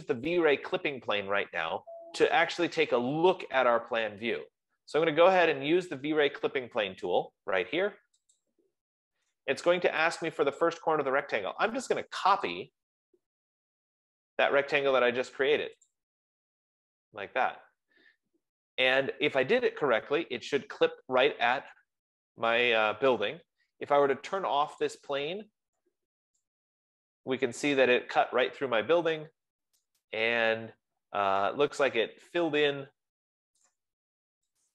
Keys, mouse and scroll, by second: 8.8-21.3 drag, 25.8 click, 28.5 right click, 28.9-29.7 scroll, 29.7 scroll, 34.1 right click.